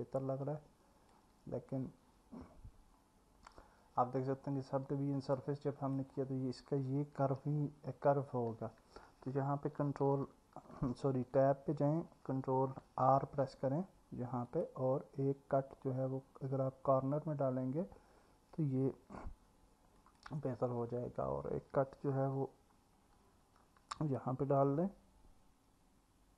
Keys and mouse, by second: 0.9 alt+middle click, 1.7 click, 2.0-3.2 drag, 3.5-6.0 drag, 11.1 Tab, 13.0 ctrl+r, 23.5 ctrl+r.